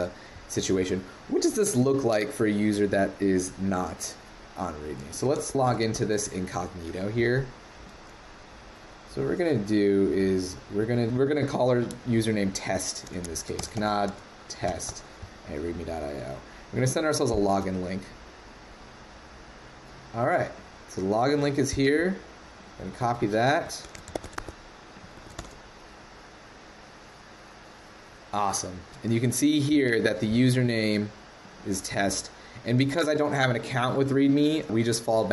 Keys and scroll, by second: 5.2 super+c, 5.4 shift+super+n, 23.0 super+Tab, 24.1 super+Tab, 24.3 super+`, 25.1 super+v.